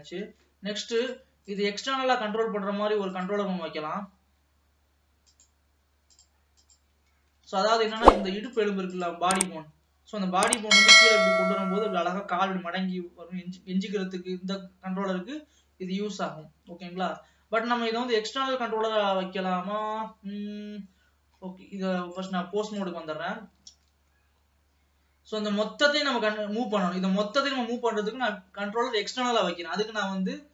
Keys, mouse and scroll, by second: 0.5 ctrl+s, 1.0-2.5 drag, 2.5 ctrl+s, 3.1-7.3 drag, 7.3 ctrl+s, 8.0-9.8 drag, 10.7 g, 17.1 ctrl+s, 17.7 alt+a, 18.2-22.3 middle drag, 22.3-23.9 drag, 23.9 ctrl+s, 24.5 scroll down 1, 24.8-26.7 scroll up 1, 26.7-27.0 scroll down 1, 27.0-28.9 middle drag, 28.9 ctrl+s, 29.1 shift+a.